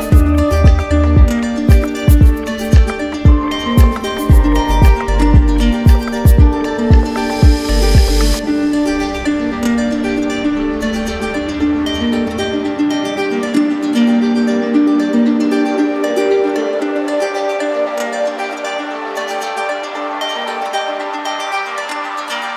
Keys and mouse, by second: 0.0 alt+click, 1.6 alt+click, 3.6 alt+click, 5.4 right click, 6.5 ctrl+z, 9.1 alt+click, 11.0 alt+click, 12.8 alt+right click, 14.1 right click, 16.8 alt+click, 18.6 right click, 21.2 alt+click, 22.2 right click.